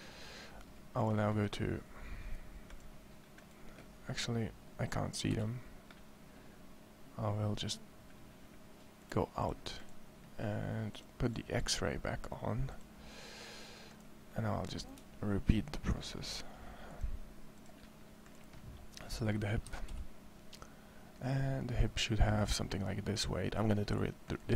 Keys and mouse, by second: 5.2 z, 19.5 KP_1, 19.7 KP_1.